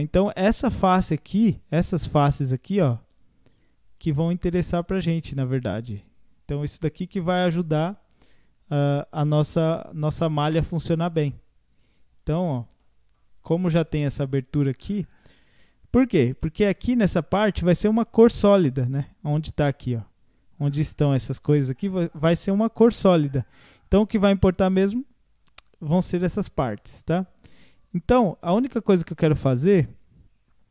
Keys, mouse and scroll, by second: 0.2 scroll down 2, 0.7 middle click, 1.0 scroll down 1, 1.9-3.1 middle drag, 3.1-4.5 drag, 4.5 middle click, 4.9-10.6 drag, 10.6-12.2 middle drag, 12.2 click, 12.5 middle click, 13.4-14.9 drag, 14.9 middle click, 15.8 scroll up 2, 16.4-19.4 middle drag, 24.8-26.2 middle drag, 26.2-26.7 scroll down 4, 26.7-29.2 middle drag, 29.2 KP_1.